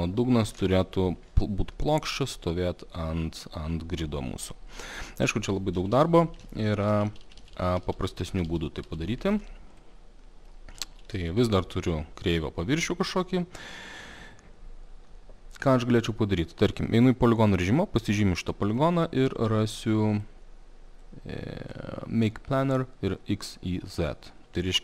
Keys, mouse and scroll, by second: 0.1 click, 0.5 0, 0.6 Return, 5.0 alt+middle click, 5.8 ctrl+z, 6.0 ctrl+z, 6.1 ctrl+z, 6.3 ctrl+z, 6.7 ctrl+z, 6.9 ctrl+z, 7.1 ctrl+z, 7.2 ctrl+z, 7.4 ctrl+z, 7.6 ctrl+z, 7.7 ctrl+z, 7.9 ctrl+z, 8.1 ctrl+z, 8.3 ctrl+z, 8.5 ctrl+z, 8.9 ctrl+z, 9.8 click, 10.5 middle click, 10.8 ctrl+z, 16.7 click, 17.4 click, 18.7 alt+middle click, 20.3 click, 21.7 click.